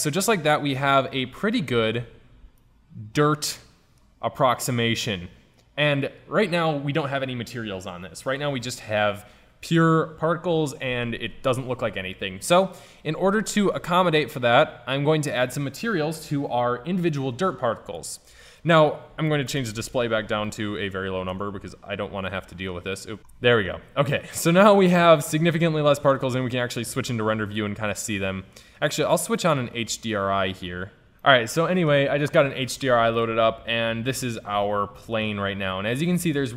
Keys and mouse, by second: 2.2 a, 13.5-18.3 middle drag, 18.3-20.1 drag, 20.8-22.6 drag, 23.1 middle drag, 23.2 click, 23.3-24.7 middle drag, 24.9 middle click, 26.4 shift+z, 29.6 middle click, 33.4 right click, 33.8 KP_Decimal.